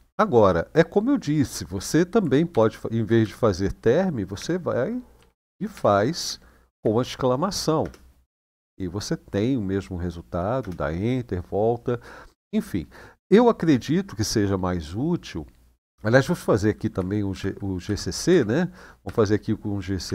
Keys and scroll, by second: 2.3 :, 2.9 Up, 4.1 Home, 4.9 Delete, 5.1 Delete, 5.3 Delete, 5.5 Delete, 6.5-8.0 typing, 10.4 Return, 17.1 shift+;, 17.6 Up, 18.0 Up, 18.8 Up, 19.8 Up.